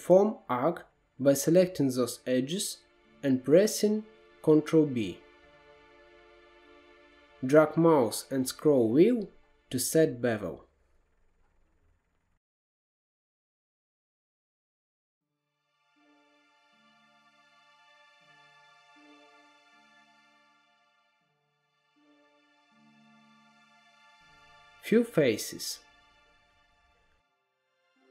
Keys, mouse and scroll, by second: 0.7 shift+click, 1.3-4.3 middle drag, 4.3 ctrl+b, 14.6 KP_1, 14.9-15.5 scroll up 2, 15.7 ctrl+z, 16.0 ctrl+b, 17.8 middle click, 18.6 scroll down 1, 19.0-20.2 middle drag, 20.2 2, 20.3 middle click, 20.9 click, 21.4 shift+click, 21.9 x, 23.2 1, 23.5 middle click, 24.2 2, 24.8 click, 25.2-26.4 middle drag, 26.4-28.1 typing.